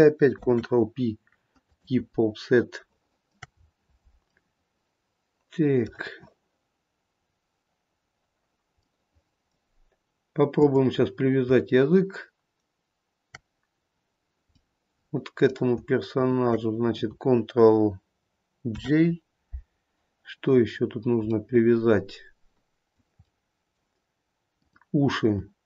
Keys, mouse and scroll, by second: 0.4 ctrl+p, 2.8 click, 2.8 middle click, 3.0 shift+middle click, 3.7-4.6 scroll up 2, 4.6 middle click, 7.3-9.2 scroll up 2, 9.2 middle click, 10.7 click, 14.8 middle click, 15.1 middle click, 16.4 shift+click, 18.9 ctrl+j, 21.6 middle click, 22.8 middle click, 23.0 middle click, 24.7 click.